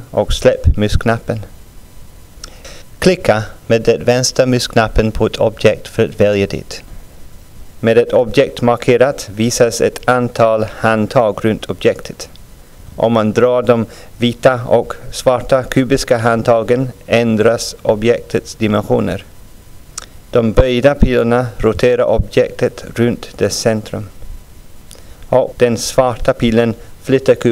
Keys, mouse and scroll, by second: 8.5 scroll up 2, 9.3-9.7 scroll up 2.